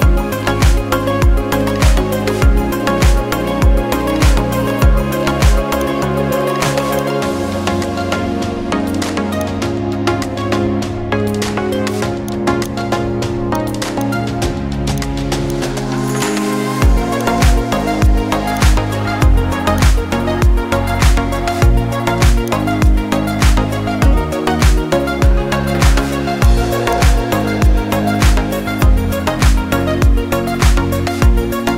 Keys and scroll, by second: 21.5 ctrl+t, 23.8 ctrl+z, 29.2 ctrl+shift+z.